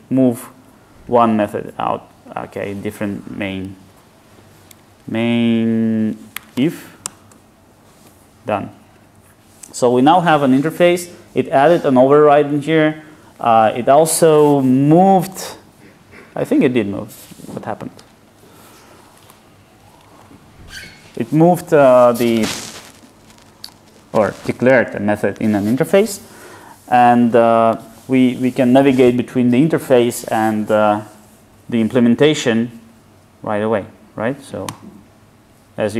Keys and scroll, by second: 27.4 alt+super+b, 32.7 super+u, 34.7 alt+super+b.